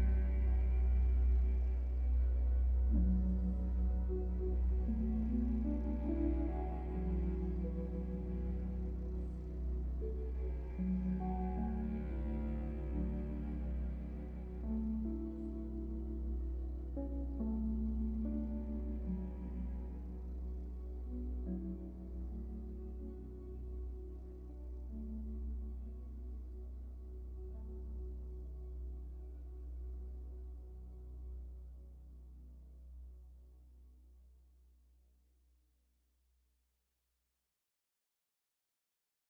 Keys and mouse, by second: 5.7 t, 13.4-15.1 drag, 16.9 click, 20.9 alt+z, 21.9 right click, 23.5 middle click, 24.5 alt+z, 25.5 alt+z, 26.8 ctrl+z, 27.1 ctrl+z, 28.0 ctrl+z, 29.4 middle click, 33.2 click, 34.7-39.2 middle drag.